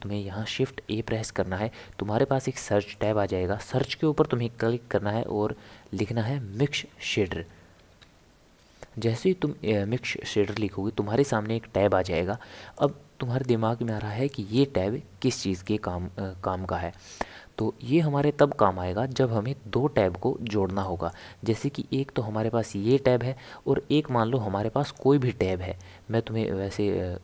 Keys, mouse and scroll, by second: 0.7 shift+a, 13.9 click, 15.2-16.5 middle drag, 16.5-16.8 scroll down 1, 16.8 scroll up 1, 16.9 scroll down 1, 16.9 scroll up 1, 17.1 scroll down 1, 17.1-20.3 middle drag, 20.8 middle click, 21.6 click, 24.3 shift+a.